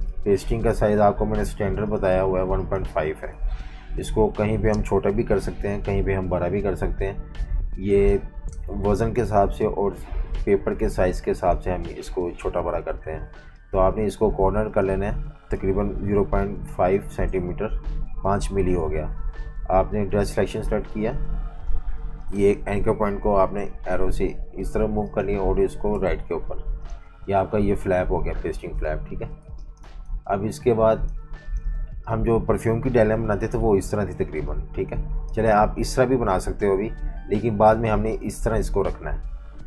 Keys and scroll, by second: 0.0-1.1 typing, 3.1-4.5 typing, 4.7 Return, 7.8 space, 15.3-16.4 typing, 17.1 Return, 23.4 Left, 25.9 Tab, 28.8 super+-, 29.4-31.4 typing, 37.6 super+z.